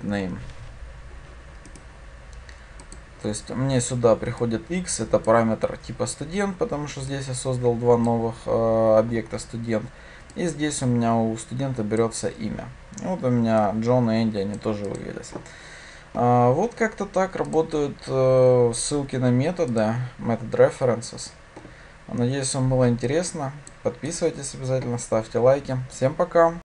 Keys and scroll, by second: 3.0 ctrl+shift+F10.